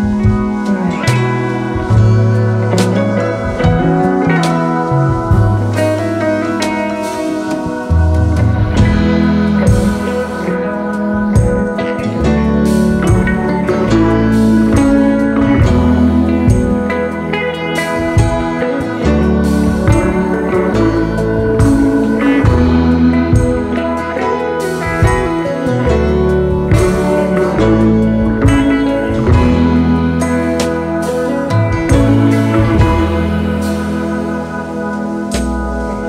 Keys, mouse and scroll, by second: 1.6 right click, 6.8 v, 6.9-7.3 alt+scroll down 1, 11.7 double click, 14.4 alt+scroll down 1, 16.6 shift+click, 17.6 alt+scroll up 4, 20.5 space, 20.6 ctrl+a, 20.8 1, 21.5 Return, 21.5 5, 22.6 Return, 23.1-23.7 space, 26.3 space, 26.5 ctrl+shift+], 27.2 alt+scroll down 2, 28.1 typing, 29.4 alt+scroll up 3, 32.5-33.5 typing, 35.2 shift+click.